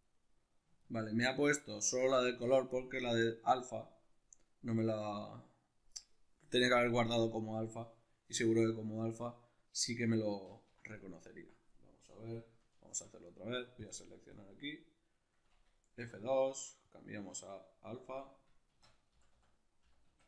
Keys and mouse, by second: 10.0 ctrl+z, 10.8 right click, 12.4 ctrl+shift+t.